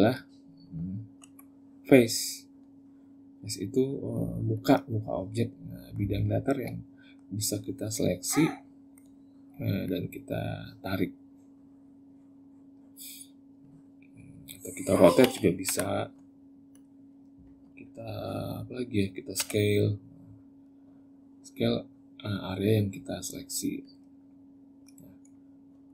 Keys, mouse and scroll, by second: 0.3 Tab, 1.0 Tab, 1.9 click, 4.3 click, 5.0 middle click, 6.1 shift+middle click, 6.8 middle click, 7.5 click, 8.1 click, 8.6 middle click, 9.6 click, 10.8 click, 13.4 click, 15.0 r, 19.1 s, 24.0 middle click, 25.5 Tab.